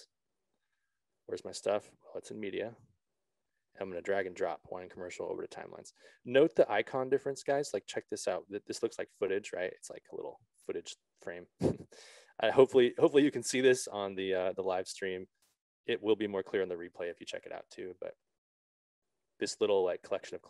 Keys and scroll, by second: 0.1 Return.